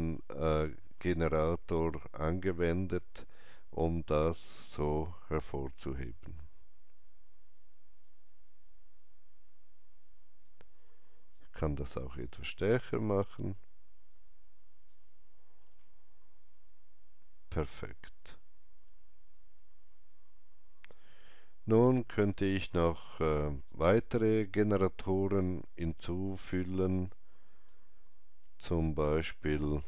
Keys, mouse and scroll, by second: 0.0-2.6 scroll down 1, 2.6-3.0 scroll up 1, 3.6 scroll up 1, 3.8 alt+right click, 7.9-11.9 drag, 11.9-15.6 alt+drag, 15.5 scroll down 1, 17.7-18.3 scroll up 1, 18.3-20.7 scroll up 1, 22.3 click, 22.3-23.7 scroll up 1, 23.7 click, 27.4 click.